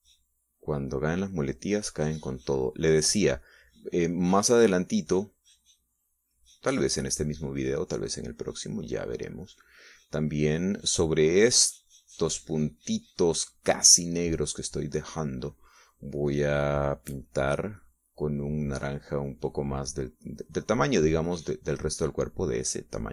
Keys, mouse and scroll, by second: 0.8-4.5 drag, 4.7-6.8 drag, 7.0-14.8 drag, 21.8 click, 22.8 click.